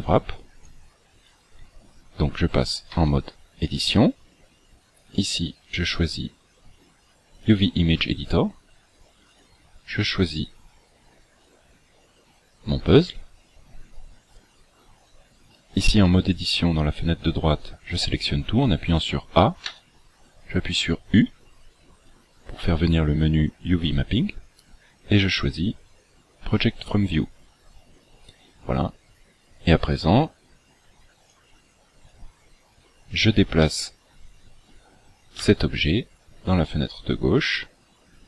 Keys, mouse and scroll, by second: 1.1-1.5 scroll up 4, 2.9 Tab, 5.1 click, 9.3 click, 15.4 a, 15.9 a, 19.7 u, 28.9 scroll up 4, 31.3 click, 33.6 shift+middle click, 35.4 g.